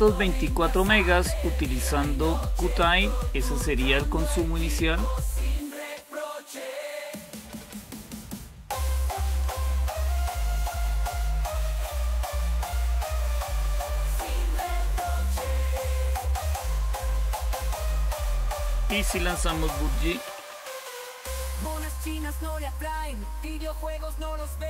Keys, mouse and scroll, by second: 5.5 click, 9.1 ctrl+super+q, 16.0 click, 17.6-19.5 drag, 19.6-22.1 typing, 22.3 Return.